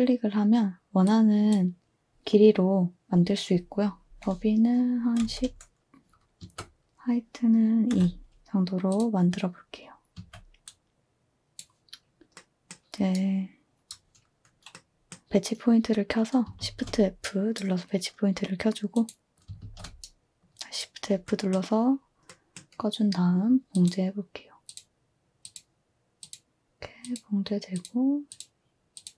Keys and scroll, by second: 4.9-5.8 typing, 6.4 Tab, 7.9 2, 10.1 a, 16.6 f, 19.6 f.